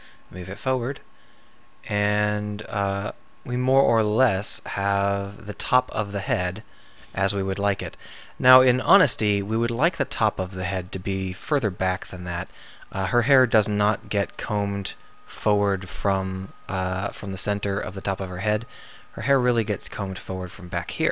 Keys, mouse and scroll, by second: 0.1 click, 0.3 g, 4.8-18.8 middle drag, 18.8 g.